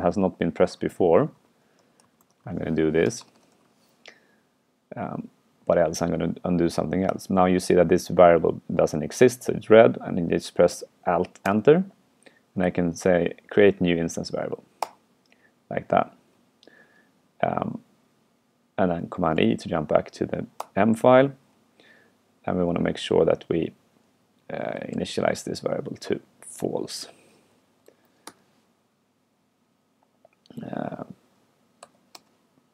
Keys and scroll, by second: 11.5 alt+Return, 19.3 super+e, 24.9 super+y, 27.1 super+y, 28.0 super+Right.